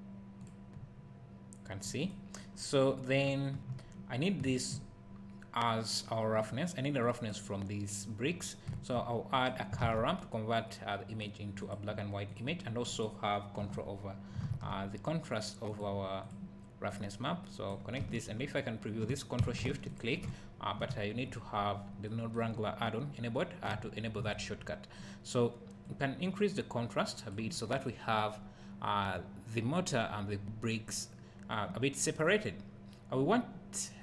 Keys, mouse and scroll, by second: 0.4 click, 0.7 `, 2.1 click, 4.5 `, 7.1-9.4 drag, 13.6 Delete, 16.9-20.0 drag, 21.0 `, 21.5-22.1 scroll up 1, 23.8 `, 24.6-25.9 scroll up 1, 25.9-34.0 drag.